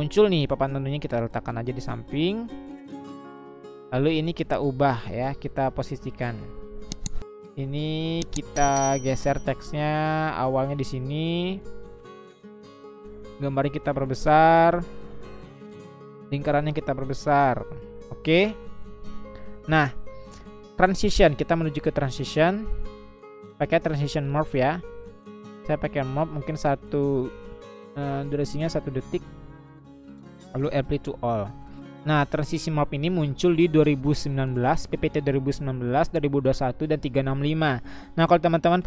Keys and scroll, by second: 1.7 Left, 1.9 Left, 2.1 Left, 2.3 Left, 2.4 Left, 2.6 Left, 9.4-10.5 Left, 14.0 Left.